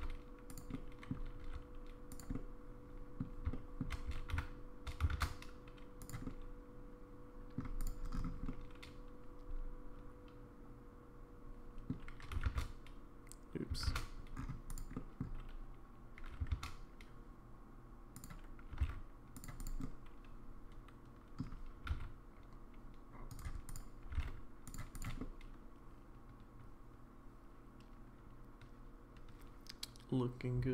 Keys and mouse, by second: 0.7 middle click, 1.4 r, 2.3 middle click, 3.5 middle click, 4.1 g, 6.3-7.6 middle drag, 7.8 click, 8.5-11.9 middle drag, 12.2 g, 12.5 shift+z, 13.9 shift+z, 15.0 middle drag, 16.2 g, 18.7 g, 19.6 click, 19.8-21.4 middle drag, 21.8 g, 24.1 g, 24.1 z, 25.0 click, 25.2-30.7 middle drag.